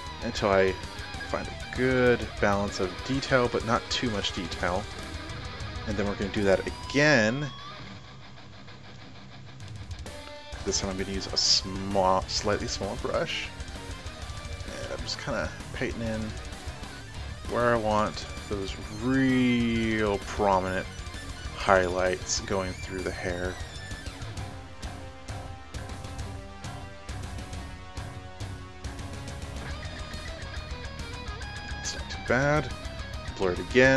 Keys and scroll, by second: 11.2 [, 33.0 ctrl+shift+g.